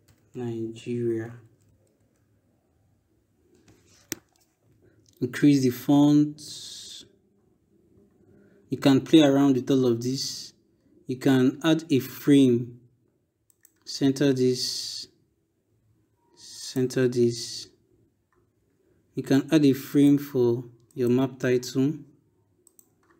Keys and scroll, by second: 0.0-1.8 typing.